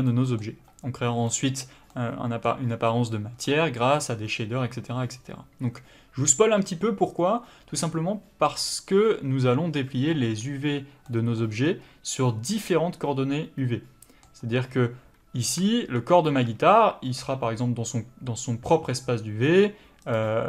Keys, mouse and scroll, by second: 2.8 scroll up 1, 3.5 middle click, 11.6-12.2 scroll down 1, 15.4 Tab, 15.8 a, 16.5 Tab.